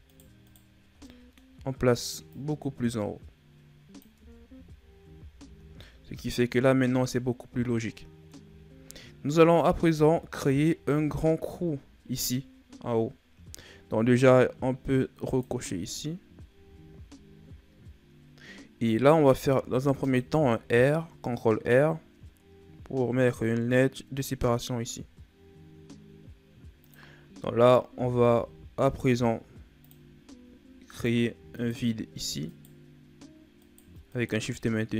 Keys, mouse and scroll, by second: 0.0 shift+right click, 0.3 shift+right click, 1.0-2.2 middle drag, 2.2 click, 4.1 Tab, 4.4-5.0 scroll down 3, 5.0 a, 5.4 a, 5.6 scroll down 1, 5.7-8.7 middle drag, 8.7-9.5 scroll up 4, 9.5 middle click, 9.8 Tab, 10.3-11.3 scroll up 1, 11.3 KP_7, 15.2 click, 19.5 ctrl+r, 27.9 ctrl+Tab, 30.8 right click, 31.5 shift+right click, 32.4 shift+right click, 33.5 shift+right click, 34.0 shift+right click.